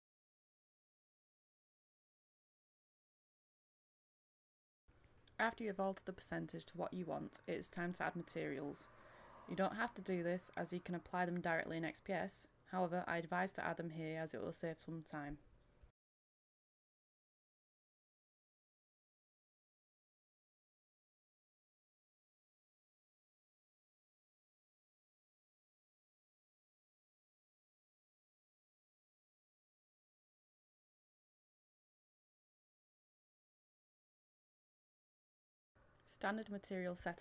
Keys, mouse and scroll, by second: 0.7 KP_5, 1.0-2.7 drag, 2.7 KP_5, 2.9 click, 2.9 middle click, 3.1 scroll down 1, 3.2 middle click, 4.3 click, 5.5 m, 7.2-17.1 drag, 17.3 middle click, 18.7-19.3 scroll down 1, 19.3 middle click, 19.8-20.4 scroll down 1, 20.4-21.0 scroll up 1, 21.0 middle click, 23.3 click, 24.8 Delete, 25.2 middle click, 25.9 click, 27.0 right click, 27.9 click, 28.7 middle click, 29.4-30.5 scroll up 1, 30.5 click, 35.1-35.6 scroll down 1, 35.6-37.2 drag.